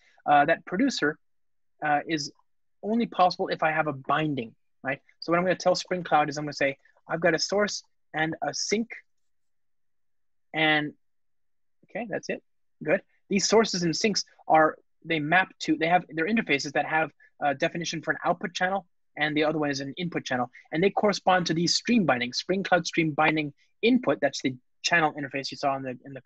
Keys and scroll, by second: 2.8 Return, 16.1 super+b, 16.4 super+b.